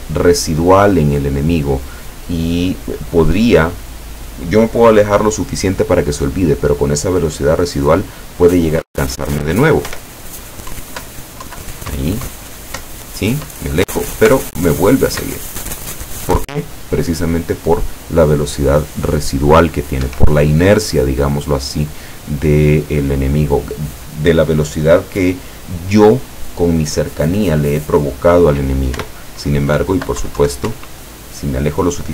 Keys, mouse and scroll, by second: 9.9 p, 10.8 Down, 12.0 Up, 14.4 Up, 20.1 Escape, 29.0 p, 29.8 Down, 30.7 Up.